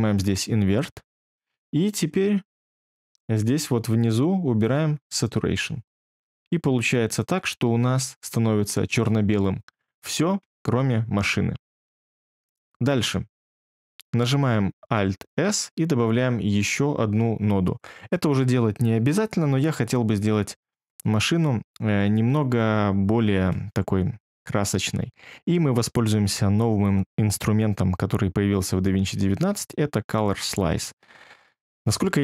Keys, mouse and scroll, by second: 15.2 alt+s.